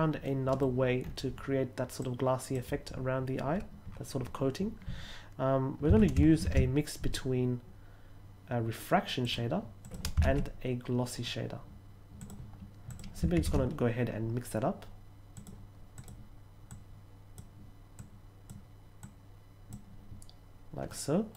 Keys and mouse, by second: 0.2 middle click, 1.9-2.4 drag, 5.8 x, 6.3 shift+a, 9.1 click, 9.7 click, 10.1 shift+a, 12.1 click, 12.8 click, 13.3 shift+a, 15.3 click, 15.9 click, 16.6-17.3 drag, 17.9-18.4 drag, 18.9-19.6 drag, 20.8 middle click.